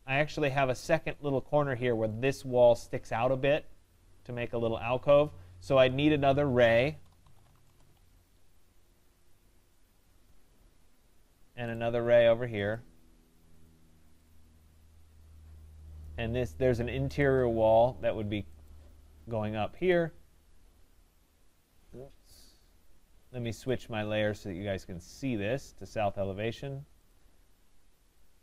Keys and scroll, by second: 7.6 Return, 14.3 Return, 23.1 Escape.